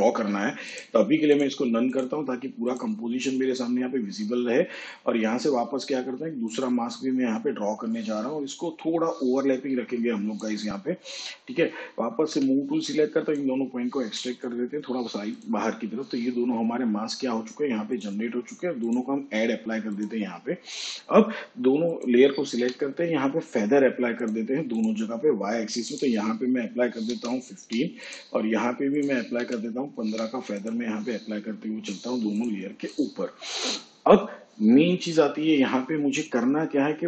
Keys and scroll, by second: 12.3 v, 14.0 Left, 22.6 f, 27.1 1, 27.6 5, 29.3 1, 30.0 5.